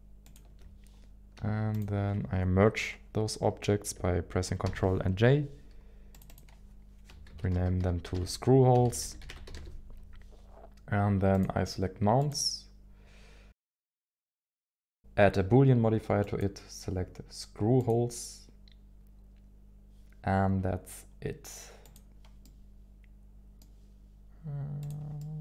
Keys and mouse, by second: 0.2 ctrl+click, 4.7 ctrl+j, 6.3 click, 14.0 click, 16.4 click, 21.8 click, 22.4-23.7 middle drag, 24.8 click, 25.2 middle click.